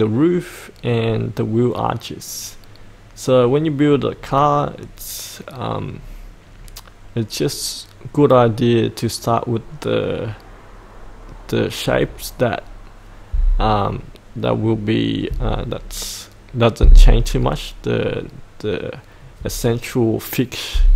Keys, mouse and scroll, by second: 4.1-4.8 scroll up 1, 4.8-6.3 scroll down 1.